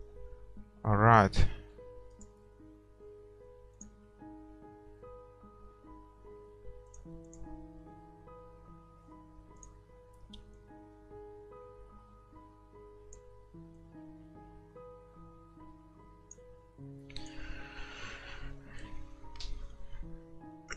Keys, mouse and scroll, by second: 2.3-3.8 right drag, 3.8-5.8 drag, 7.0-9.4 drag, 9.8-11.5 drag, 17.6-19.2 drag.